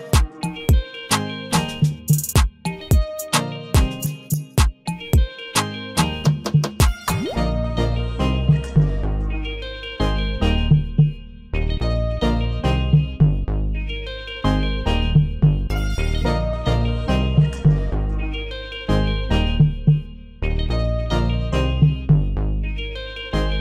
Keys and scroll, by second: 8.9 ctrl+a, 12.3 ctrl+d.